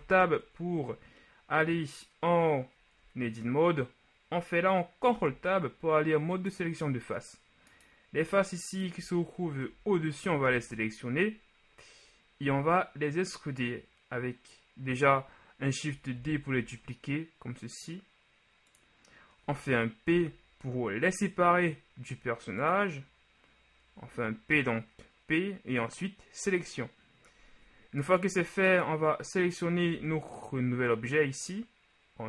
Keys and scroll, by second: 0.1 Tab, 5.2 ctrl+Tab, 9.7 KP_1, 10.5 z, 16.4 shift+d, 16.6 shift+z, 30.1 Tab.